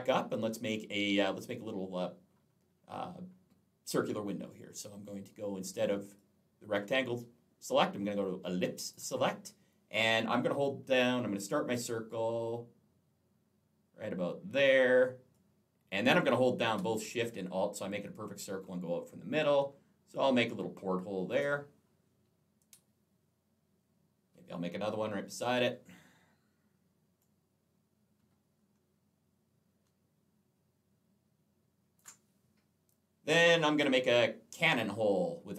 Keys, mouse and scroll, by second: 6.0 click, 8.7 click, 15.2 click, 27.0 click.